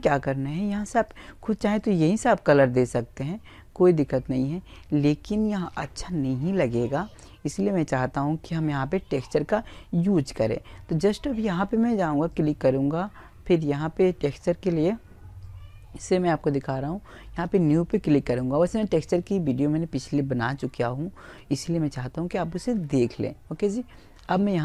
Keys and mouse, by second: 10.1 click, 11.6 right click, 13.1 click, 15.7 click.